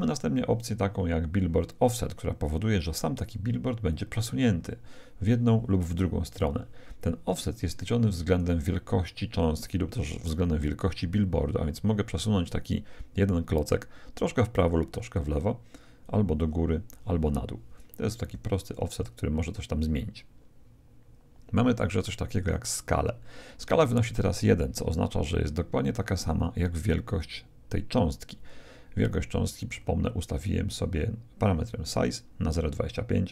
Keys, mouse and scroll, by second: 3.8-5.6 drag, 16.0-17.6 drag, 29.7-32.0 middle drag.